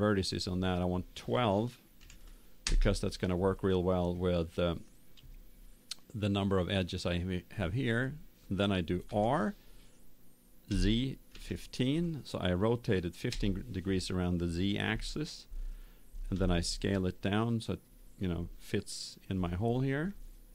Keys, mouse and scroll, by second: 0.3-2.1 drag, 9.0 r, 16.3 s, 20.0-20.5 middle drag.